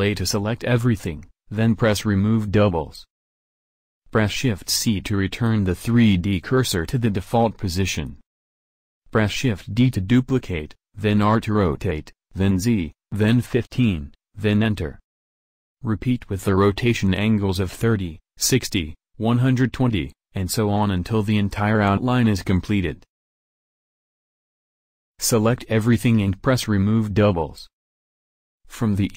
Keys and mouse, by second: 4.5 shift+c, 5.2 middle click, 8.5 shift+d, 11.2 a, 11.6 a, 12.4 shift+d, 16.1 a, 16.5 a, 17.1 shift+d, 19.4 a, 19.6 a, 20.2 shift+d, 22.6 a, 22.8 a, 23.4 shift+d, 25.3 a, 25.5 a.